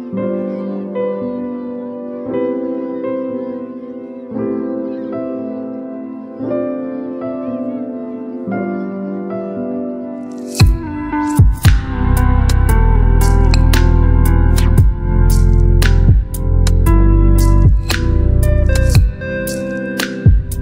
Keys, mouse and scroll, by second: 0.6-11.4 drag, 14.3-18.0 drag.